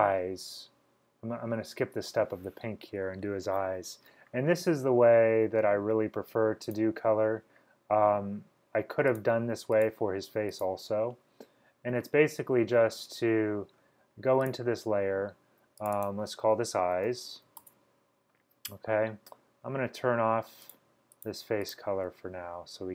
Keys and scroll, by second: 16.5-18.0 typing.